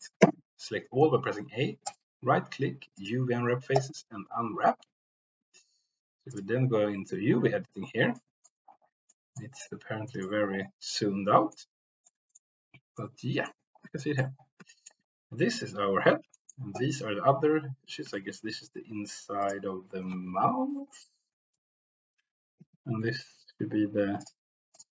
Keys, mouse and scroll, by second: 0.1 a, 1.8-5.0 right drag, 6.3 click, 8.1 middle click, 9.0 middle click, 10.0 middle click, 10.8 middle click, 12.0 middle click, 12.9 middle click, 13.9 shift+middle click, 14.7 shift+middle click, 16.3 shift+middle click, 18.1 shift+middle click, 20.7 l, 21.6 g, 22.5 Escape, 24.1 click, 24.7 click.